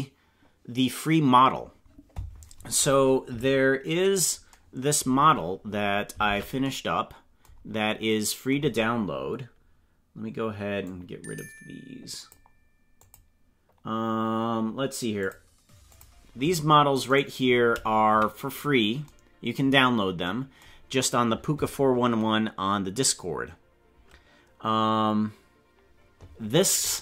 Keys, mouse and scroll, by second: 5.1-6.1 scroll down 12, 6.2 ctrl+Tab, 6.6 scroll down 1, 7.6-8.0 scroll down 2, 10.8-12.2 drag, 12.9 click, 15.3 click, 16.1 click, 17.1 right click, 18.0 KP_Decimal, 19.8-20.2 scroll down 3.